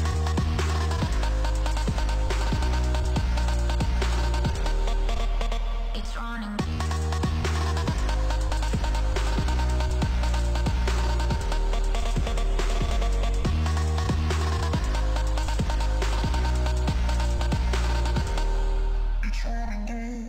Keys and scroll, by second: 4.5 u.